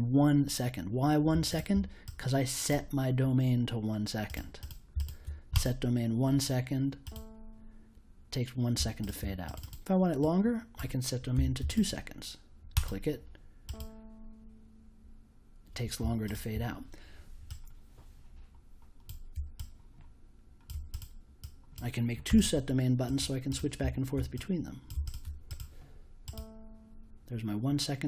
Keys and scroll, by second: 11.3 2, 22.2 1.